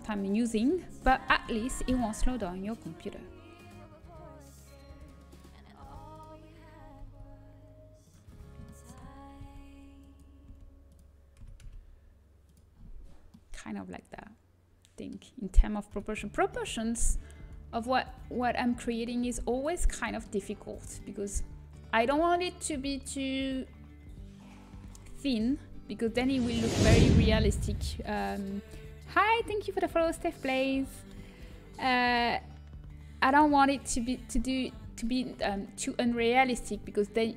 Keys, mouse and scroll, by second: 2.7 r, 8.0 g, 10.3 s, 10.8 s, 12.4 s, 15.8 KP_3, 18.3 middle click, 18.5-19.8 drag, 19.8 middle click, 20.0-23.4 middle drag, 26.0 middle click, 31.4 middle click.